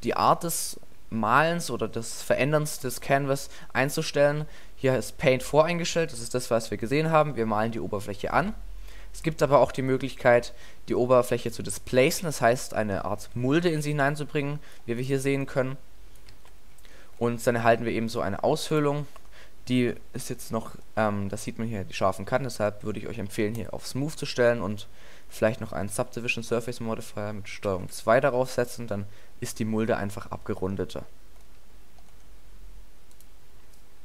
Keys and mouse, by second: 3.2-3.5 middle drag, 11.7-13.8 middle drag, 13.4 alt+a, 16.4 alt+a, 24.2 middle click, 24.5-25.5 drag, 25.5 middle click, 27.8 ctrl+2.